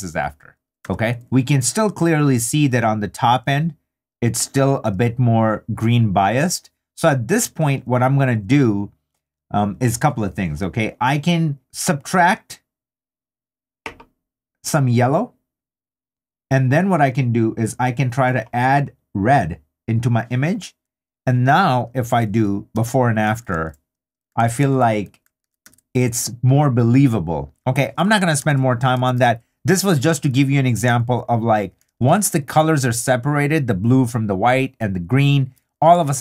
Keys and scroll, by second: 0.8 3, 1.2 super+d, 22.3 super+d, 27.5 super+d, 28.9 super+i, 30.0 super+i, 30.2 super+d, 36.0 super+d.